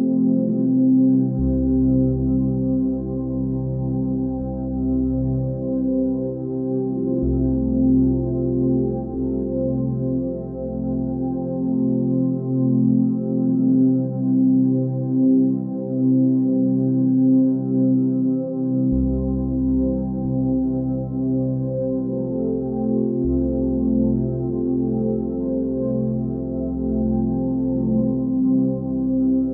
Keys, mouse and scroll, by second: 8.7 ctrl+t, 23.8 ctrl+space.